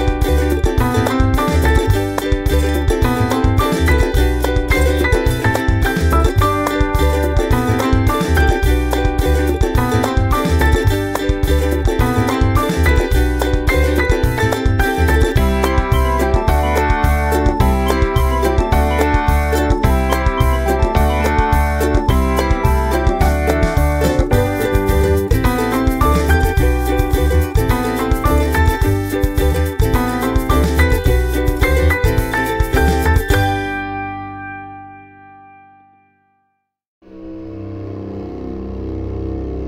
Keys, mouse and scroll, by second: 1.0 click, 1.3 click, 2.2 ctrl+v, 3.1 ctrl+scroll up 2, 3.5 click, 4.3-6.3 typing, 7.6 click, 8.0-9.5 drag, 9.8 click, 10.6 click, 11.5 click, 12.2 click, 12.4 click, 13.3 click, 13.8 ctrl+click, 14.2 ctrl+scroll down 2, 14.7 click, 15.4 click, 16.1 click, 17.0 click, 17.5-19.2 ctrl+drag, 19.4 click, 19.8 click, 20.3 click, 21.1 click, 22.4 ctrl+middle click, 23.0 click, 24.1 ctrl+middle click, 24.4 ctrl+scroll down 1, 25.2 click, 26.1 click, 27.0 click, 27.5 click, 28.6 click, 28.9 click, 29.9 click, 30.3 click, 31.6-33.1 drag, 33.3 ctrl+scroll up 2, 34.2-34.8 ctrl+scroll down 6, 35.1 ctrl+s, 35.7 scroll up 2, 36.3 scroll up 4, 36.8 click, 37.1 click, 38.1 ctrl+c, 38.5 click.